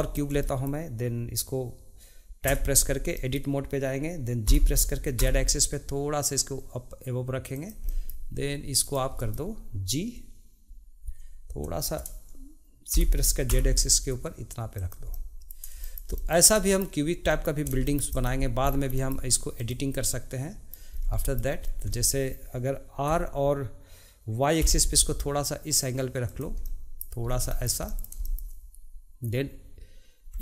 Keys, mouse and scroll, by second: 0.4 middle click, 2.4 Tab, 3.1-4.4 middle drag, 4.4 g, 7.9 middle click, 8.8 click, 9.2-12.4 middle drag, 12.9 g, 15.1 middle click, 18.1 click, 18.6 scroll down 1, 18.9 shift+middle click, 19.5 click, 19.9-20.9 middle drag, 20.9 scroll up 2, 21.2 shift+middle click, 21.6 scroll up 1, 21.9-23.1 shift+middle drag, 23.1 r, 26.6 middle click, 27.5-30.3 shift+middle drag.